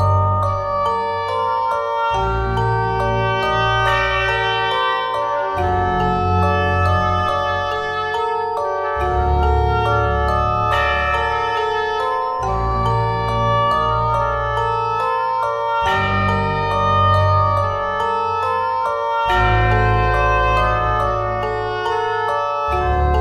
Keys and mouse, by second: 2.3 KP_1, 2.7 middle click, 3.5 middle click, 4.3 middle click, 4.4 click, 5.1 ctrl+z, 5.5 Tab, 7.3 click, 9.8 middle click, 10.1 middle click, 10.3 middle click, 13.2-14.5 drag, 14.6 Tab, 16.8 middle click, 19.4 KP_1, 20.2 click, 20.7 Tab, 21.2 Tab, 22.0 Tab, 22.1 z.